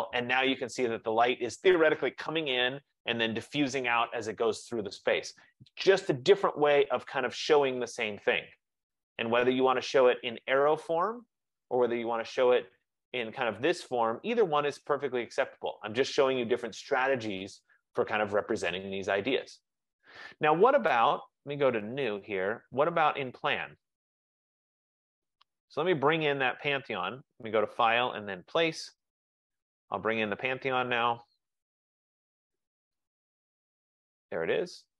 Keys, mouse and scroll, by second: 9.7 click, 16.3 F15, 21.5 click, 22.3 click, 24.1 click, 24.3 click, 26.2 click, 28.3 click, 29.6 click, 30.9 click, 32.9 click.